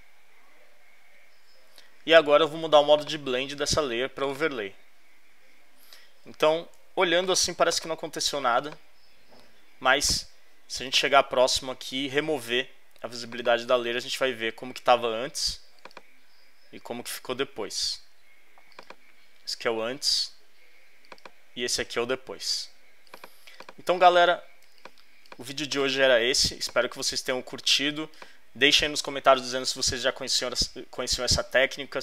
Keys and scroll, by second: 6.8 z, 9.7 space, 24.6 alt+space, 26.4 alt+space, 27.2 space.